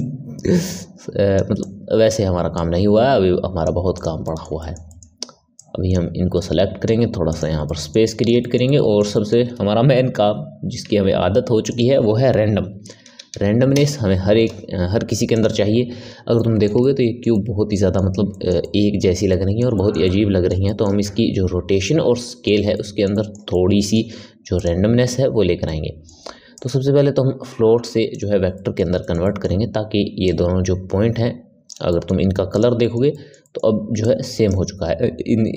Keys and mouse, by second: 1.5 click, 2.5 click, 3.9 click, 4.2-5.5 middle drag, 5.5 click, 7.2 click, 7.6-10.8 middle drag, 10.8 shift+a, 16.3-24.5 middle drag, 24.5-25.6 drag, 25.6-26.5 middle drag, 26.5-28.5 drag, 28.5-30.2 middle drag, 30.2 click, 32.7-33.9 ctrl+middle drag, 33.9 click.